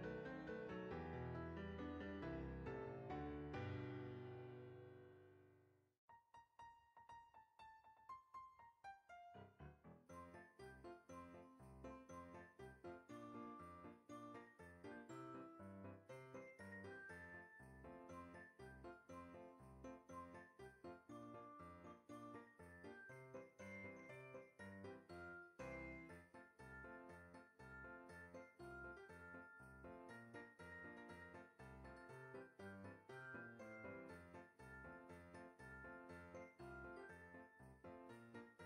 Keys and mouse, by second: 1.0 KP_1, 2.0 middle click, 2.9 Tab, 3.7 click, 4.4 alt+shift+click, 5.7 s, 8.6 click, 8.8 g, 9.0 z, 9.4 click, 9.7 Tab, 10.1 click, 10.4 KP_1, 11.2 click, 11.6 Tab, 12.3 click, 12.8 alt+shift+click, 13.6 s, 14.3 click, 14.5 g, 14.7 z, 16.9 click, 17.1 Tab, 17.7 click, 18.4 middle click, 20.2 KP_1, 22.6 click, 23.2 g, 25.7 click, 25.9 KP_7, 26.9 g, 28.2 click, 28.7 s, 29.1 x, 30.6 click, 30.8 Tab, 31.8 ctrl+r, 33.3 click, 33.9 right click, 36.0 KP_3, 37.1 alt+z, 37.5 click.